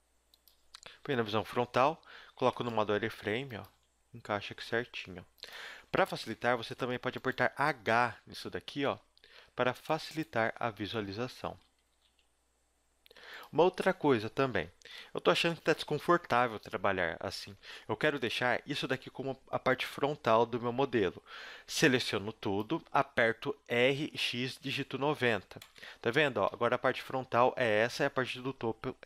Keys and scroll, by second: 1.0 KP_1, 2.0 z, 3.1 s, 3.8 g, 6.3 Tab, 6.6 z, 8.4 h, 8.8 KP_1, 10.9 Tab, 11.6 z, 11.9 g, 13.8 Tab, 14.4 a, 14.9 alt+h, 15.3 a, 16.1 z, 21.8 b, 23.7 r, 26.4 KP_1, 26.5 KP_0, 27.8 KP_7, 28.6 z.